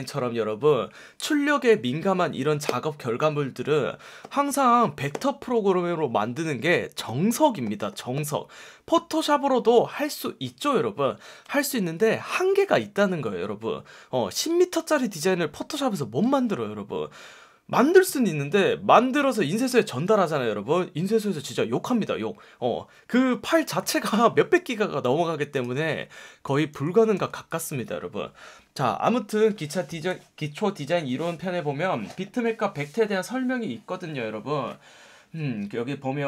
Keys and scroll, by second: 26.3 super+z, 27.1 v.